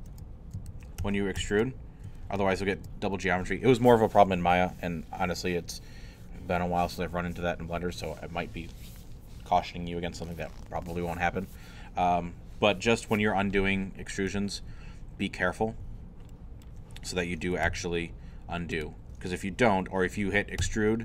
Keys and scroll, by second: 2.2 ctrl+shift+z, 17.6 alt+g, 20.6 e.